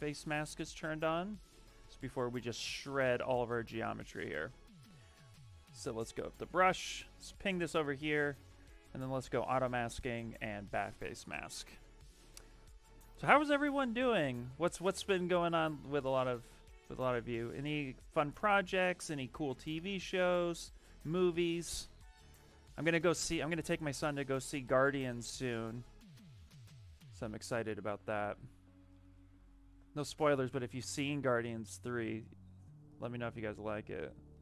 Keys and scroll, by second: 0.0 ctrl+z, 1.1 ctrl+z, 3.7 ctrl+shift+z, 19.0 s.